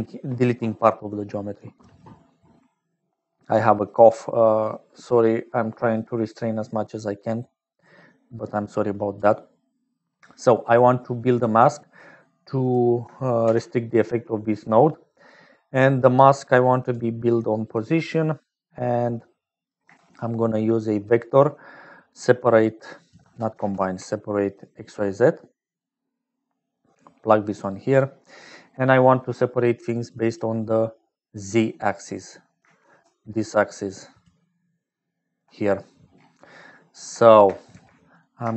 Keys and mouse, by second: 3.8 click, 4.6 click, 5.7 click, 7.8 click, 8.5 click, 9.5 click, 10.4 click, 11.4 click, 12.6 click, 13.4 shift+a, 18.2 click, 19.4 click, 19.8 shift+a, 23.1 x, 23.6 shift+a, 26.7 click, 27.9 click, 29.1 click, 30.0 click, 30.8 click, 32.9-34.8 d, 34.8 click, 37.2 shift+click, 37.6 g.